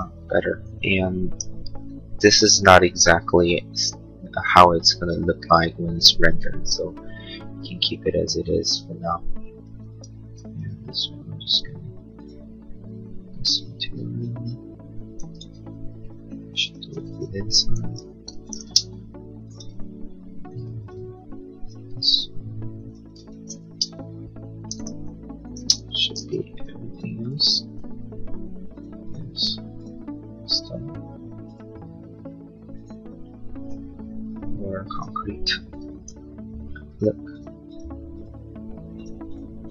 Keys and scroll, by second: 9.9 b, 15.0 ctrl+z, 16.7 space, 17.7 ctrl+a, 17.9 b, 18.4 space, 18.8 Escape, 20.7 b, 23.1 ctrl+z, 23.7 space, 23.9 Escape, 25.5 space, 25.7 Escape, 26.3 b.